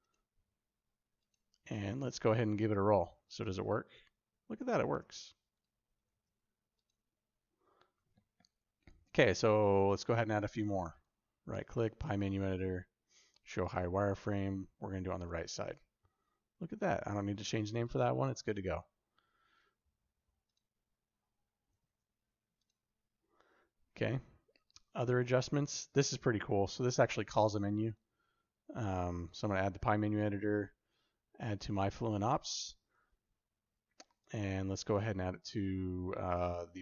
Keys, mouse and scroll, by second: 3.1 shift+u, 4.7 shift+u, 5.9 shift+u, 10.9-13.6 right drag, 15.3 shift+u, 21.6 shift+u, 27.7-36.8 right drag.